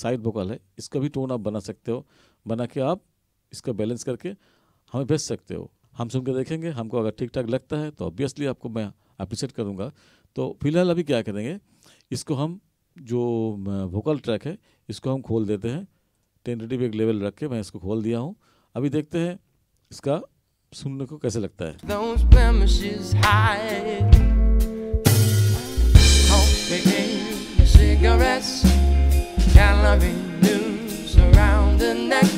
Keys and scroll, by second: 21.8 space.